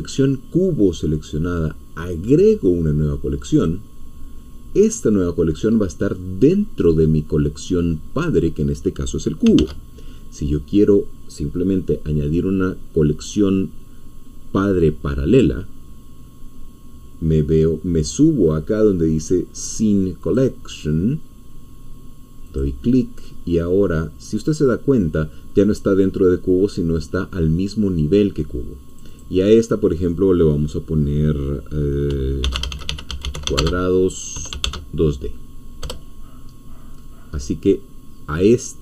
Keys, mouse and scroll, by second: 3.5 click, 9.5 ctrl+z, 20.3-21.6 drag, 22.6 click, 29.0-32.1 drag, 32.1-34.6 typing, 35.8 Return.